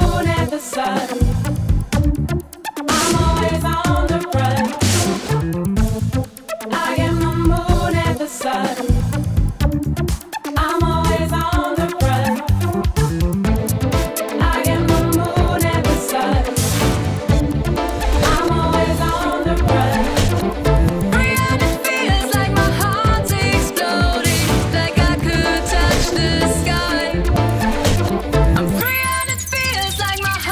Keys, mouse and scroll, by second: 4.3-13.9 drag, 14.0-16.1 drag, 21.5 click, 22.0-25.1 drag, 25.3-29.9 drag, 30.4-30.5 drag.